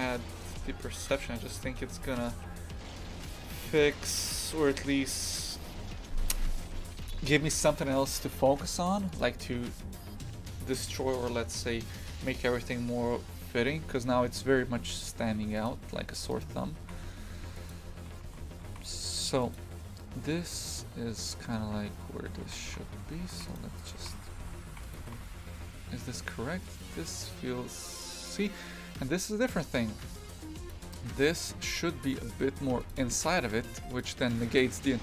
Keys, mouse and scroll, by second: 0.5 Tab, 1.4 right click, 2.0 g, 9.2 click, 15.7 click, 16.3 right click, 16.8 shift+f, 18.1 a, 18.3 a, 18.7 shift+f, 22.5 shift+f, 23.8 right click, 24.0 shift+f, 25.1 g, 32.9 click, 33.2 shift+f.